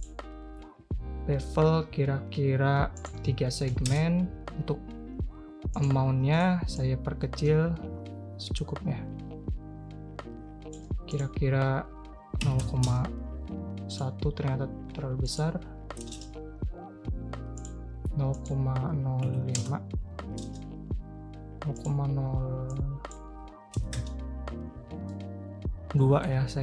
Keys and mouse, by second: 3.0-4.5 drag, 5.8 click, 6.8 click, 11.1-17.0 drag, 17.6-21.5 drag, 21.7-24.7 drag, 25.1-26.2 middle drag, 26.5 ctrl+a.